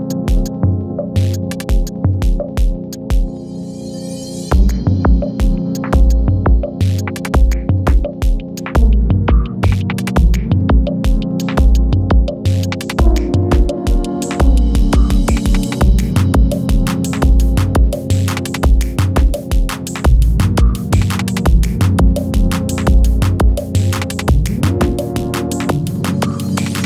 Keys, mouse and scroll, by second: 1.7 Up, 15.7 u, 24.0 click.